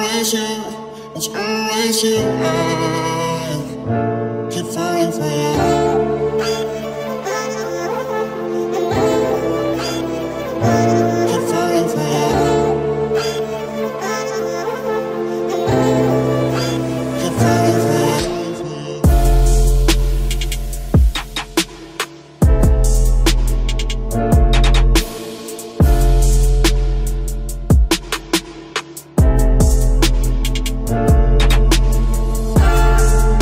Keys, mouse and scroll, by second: 1.3 right click, 1.4-5.7 drag, 2.5 c, 7.3 KP_Decimal, 8.9 e, 9.7 z, 13.6 KP_3, 14.2 Tab, 14.9 z, 15.7 Tab, 16.4 c, 20.9 click, 21.1 z, 21.4-22.7 middle drag, 23.4 click, 24.4 c, 25.1-26.8 drag, 26.7 KP_3, 27.2 Tab, 27.9 ctrl+s, 28.4 z, 29.0 Tab, 31.7 z, 32.8 z.